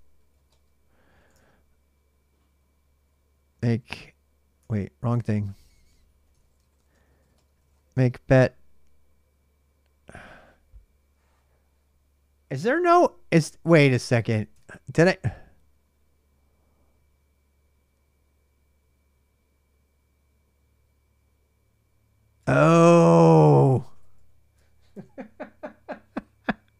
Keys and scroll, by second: 0.0-8.0 typing, 6.1 ctrl+[, 12.8 ctrl+a, 13.0 ctrl+a, 14.3 super+Tab, 22.2 super+Tab, 23.3-25.1 typing, 26.4-26.7 typing.